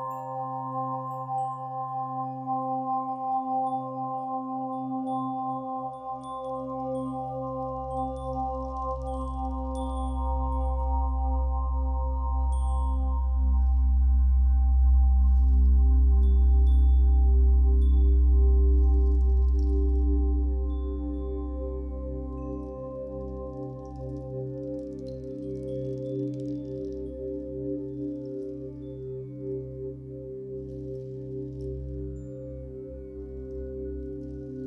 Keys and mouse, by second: 2.4 click, 10.5 click, 15.6 alt+click, 16.3 click, 20.3 click, 23.8 click, 30.8 v, 32.7 click.